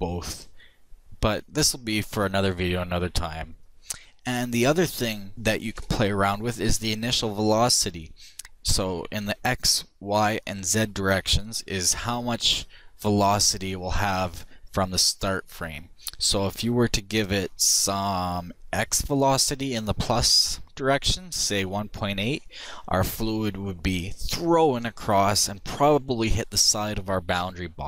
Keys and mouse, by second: 19.1-21.0 drag.